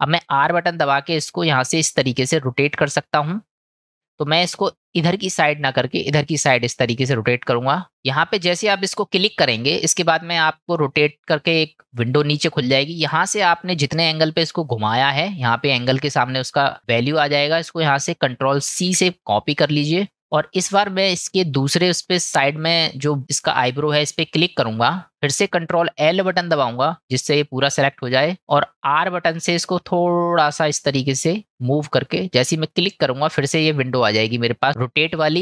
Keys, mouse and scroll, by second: 18.3-21.4 ctrl+drag, 26.3 ctrl+l, 32.8 click.